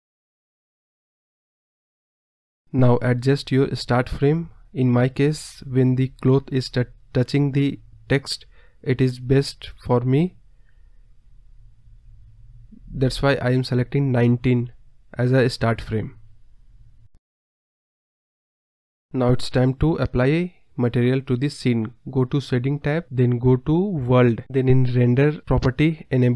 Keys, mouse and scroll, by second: 0.5-1.7 scroll down 7, 1.8 click, 3.9 click, 5.6 click, 5.9 KP_0, 6.4 KP_0, 7.0 space, 7.3 space, 8.0 Left, 8.2 Left, 10.7 Right, 11.0 Left, 11.1 Left, 12.8 click, 13.7-14.1 scroll down 3, 14.1 middle click, 14.6-17.0 scroll up 9, 14.9 middle click, 18.8 space, 19.6 space, 19.9-20.9 drag, 21.4 drag, 21.7-22.0 scroll down 2, 22.0 KP_0, 22.3-22.7 scroll up 2, 23.0 click, 23.4-23.8 scroll down 3.